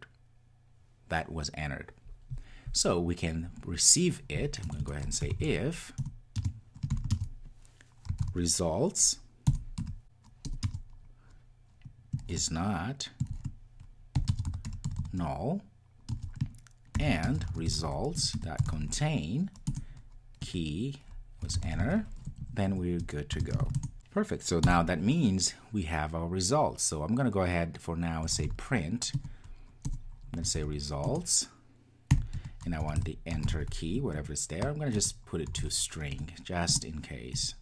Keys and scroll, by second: 6.0 Return, 18.1 Return, 23.6 Return, 29.1 Return, 30.9 Return, 36.6 Return.